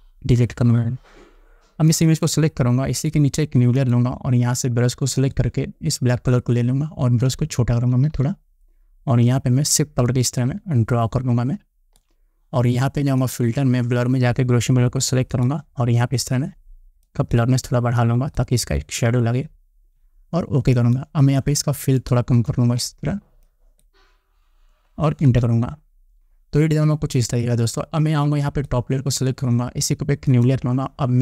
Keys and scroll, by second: 0.0 ctrl+d, 7.8 [, 25.8 Return.